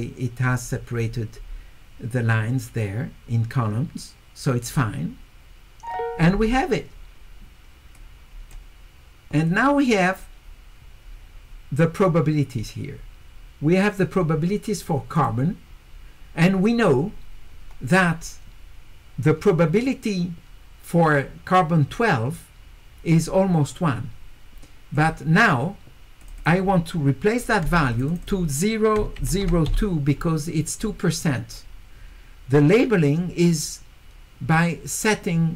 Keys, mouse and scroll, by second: 4.7 click, 7.9 click, 9.5 click, 12.0 click, 15.2 click, 24.9 click, 26.2 click, 26.4 click, 27.9 click, 28.1 click, 28.2 click.